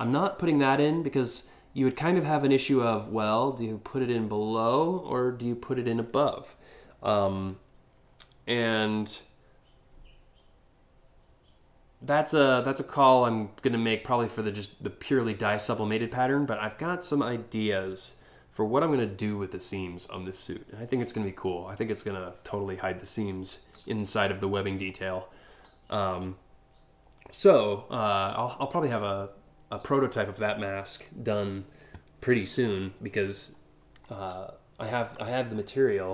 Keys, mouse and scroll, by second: 25.0-25.3 scroll down 3, 33.7 alt+scroll up 1, 34.6-35.2 scroll up 2, 35.2 scroll down 1.